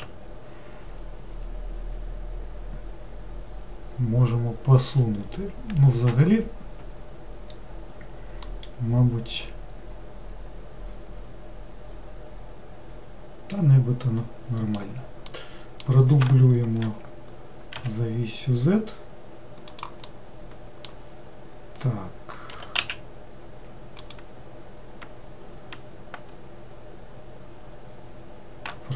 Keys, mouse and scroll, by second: 8.4-11.6 middle drag, 15.3-16.6 middle drag, 16.6 shift+d, 20.0-22.5 middle drag, 22.5 g.